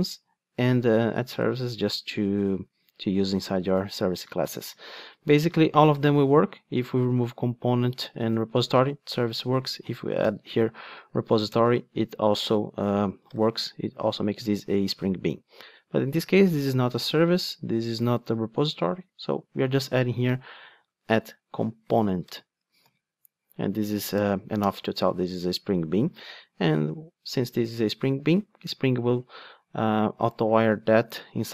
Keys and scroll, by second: 7.4 super+x, 11.5 Return, 20.8 Return, 22.8 alt+super+l, 24.1 alt+Return.